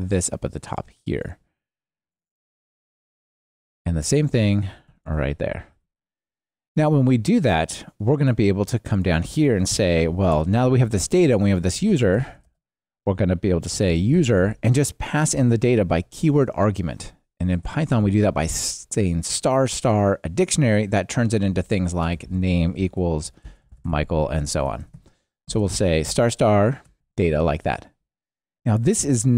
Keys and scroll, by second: 3.5 super+c, 5.7 super+v, 24.7 alt+shift+Left, 27.4 Escape.